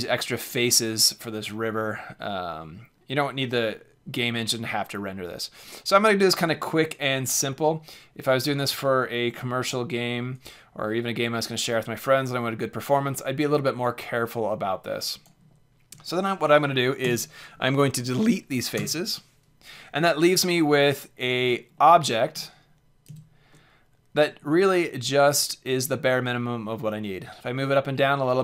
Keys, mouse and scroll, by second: 17.0 x, 21.4 Tab, 21.7-24.9 middle drag, 23.0 z.